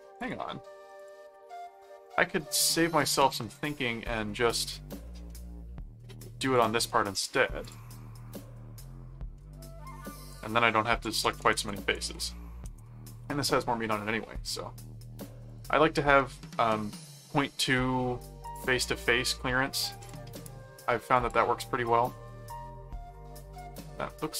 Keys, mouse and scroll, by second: 0.2 click, 1.0 click, 1.6 middle click, 2.2 ctrl+Tab, 3.3 ctrl+click, 5.3 middle click, 6.6 click, 7.6 click, 9.4 middle click, 10.3 click, 10.8-12.8 typing, 15.5 click, 18.5 click, 18.8 middle click, 20.0 click, 21.1 click, 21.8-24.3 middle drag.